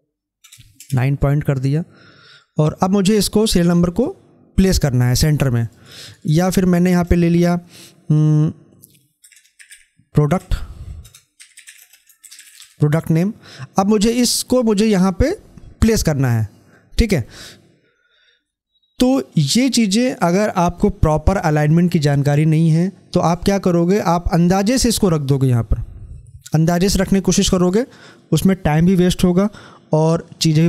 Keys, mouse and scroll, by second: 2.3 click, 2.5-5.7 drag, 5.7 right click, 6.2 click, 11.3-11.6 typing, 13.8-18.4 drag, 23.9-30.1 drag.